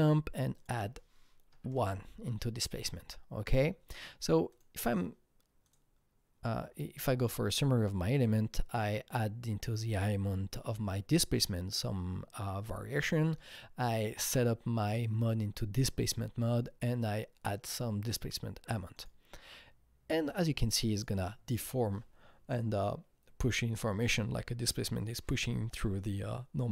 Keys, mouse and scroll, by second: 0.5 double click, 1.4 KP_1, 1.7 Return, 4.6 Return, 4.6 click, 4.6 KP_1, 5.6-7.8 drag, 7.8 KP_Enter, 18.9 click, 20.9 click.